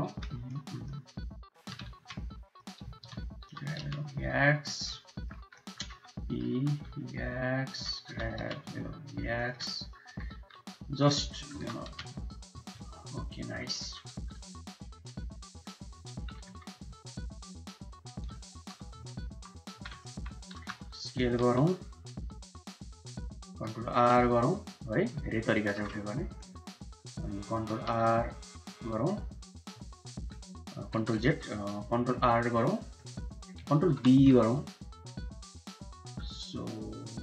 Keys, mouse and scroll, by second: 0.5 click, 1.7 shift+z, 2.2 click, 2.8 shift+z, 3.4 g, 4.7 middle click, 5.4 middle click, 6.4 e, 6.4 s, 8.0 g, 9.5 middle click, 10.0 e, 10.5 s, 11.2 middle click, 11.5 g, 12.7 click, 13.8 e, 14.2 s, 15.3 click, 15.8 f, 16.3 e, 18.5 3, 19.6 2, 20.5 s, 23.9 ctrl+r, 25.6 3, 27.6 ctrl+r, 30.9 ctrl+z, 32.2 ctrl+r, 33.8 ctrl+b.